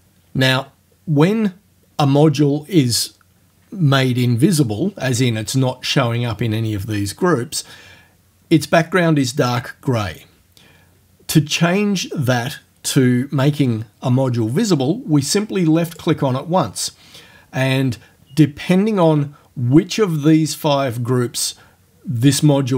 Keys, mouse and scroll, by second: 16.0 click.